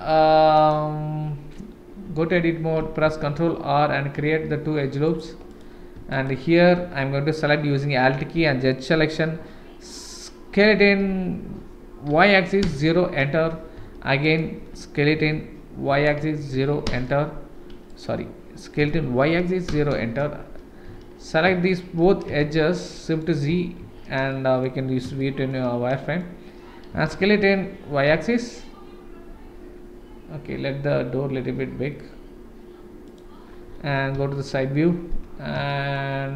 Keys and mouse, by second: 2.1 Tab, 3.0 ctrl+r, 6.1 alt+click, 10.6 s, 14.3 alt+click, 15.1 s, 18.8 s, 22.4 shift+z, 22.8 middle click, 23.8 shift+z, 24.3 middle click, 25.2 shift+middle click, 25.9 middle click, 26.9 s, 34.1 KP_3, 35.7 shift+middle click, 36.1-36.3 middle drag.